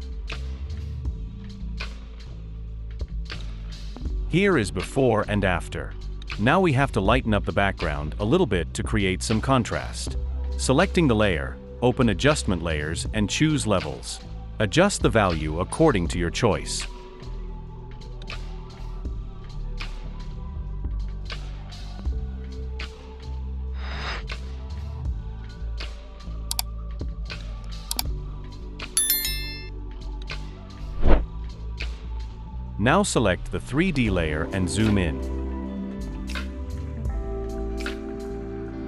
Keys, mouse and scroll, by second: 28.8 scroll up 1.